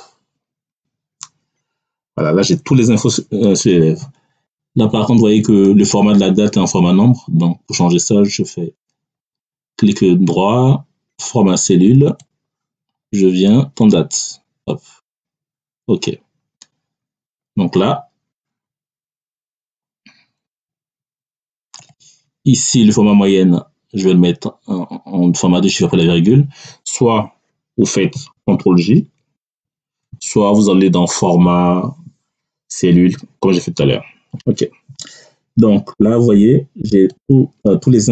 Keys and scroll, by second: 29.4 ctrl+?.